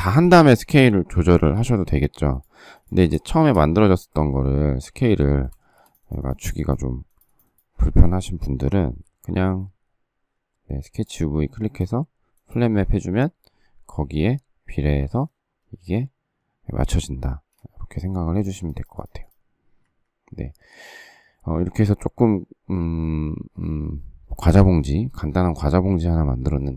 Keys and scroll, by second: 1.5 s, 3.0 space, 3.3 Escape, 5.0 ctrl+z, 5.6 space, 8.7 alt+t, 16.7 space, 17.2 space, 17.7 Escape, 19.8 Escape.